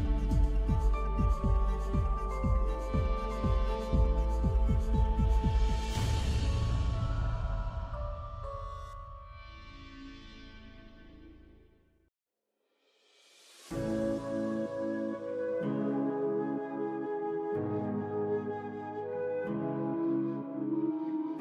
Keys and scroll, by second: 2.0 h, 14.7 ctrl+shift+e.